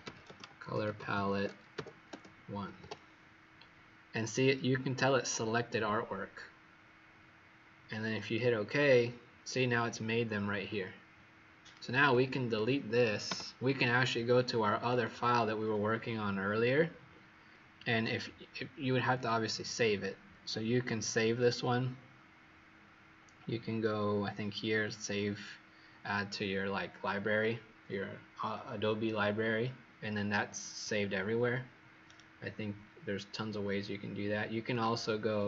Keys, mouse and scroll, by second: 0.0-3.2 typing, 8.1 click, 12.1 click, 13.2 Delete, 14.8 click, 32.0 right click, 34.6 click.